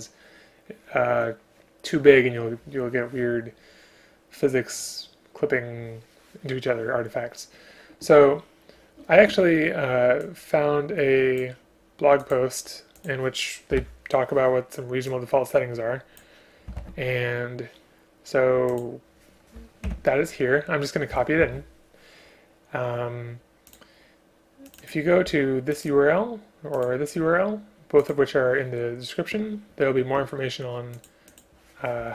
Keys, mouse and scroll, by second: 13.7 BackSpace, 16.8 ctrl+c, 19.9 shift+Home, 21.4 ctrl+v, 25.8 click, 26.8 click, 26.9 click.